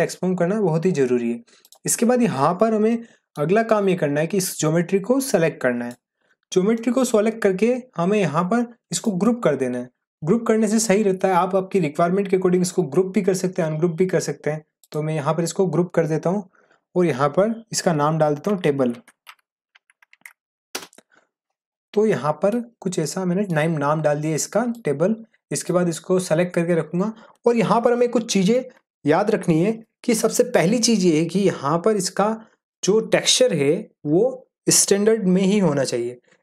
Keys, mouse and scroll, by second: 1.6 click, 2.7 scroll down 1, 2.8-3.5 middle drag, 4.4-5.9 drag, 6.7 middle click, 8.9 click, 18.2-20.6 typing, 20.7 Return, 22.1-22.7 middle click, 22.7 scroll up 1, 23.0-23.6 middle drag, 24.7-25.6 drag.